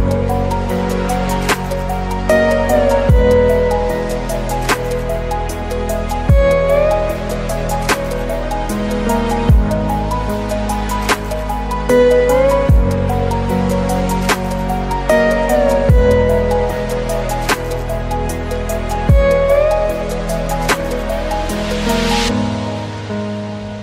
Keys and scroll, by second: 2.8 ctrl+alt+space, 6.7 ctrl+alt+space, 11.8 ctrl+u.